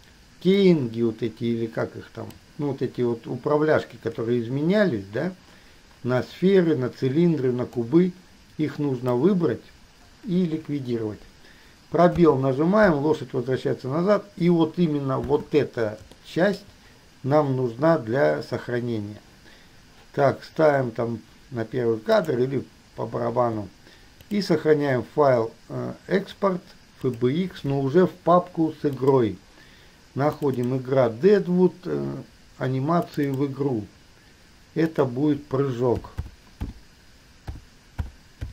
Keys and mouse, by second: 0.9-2.6 drag, 8.0-9.4 drag, 10.7 Delete, 12.4 space, 15.9 space, 22.2 middle click, 24.4-27.8 middle drag.